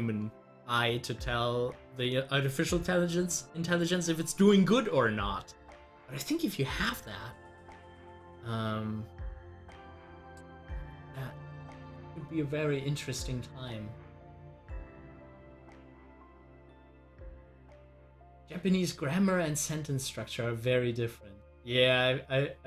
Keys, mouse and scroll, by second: 14.7-20.9 drag.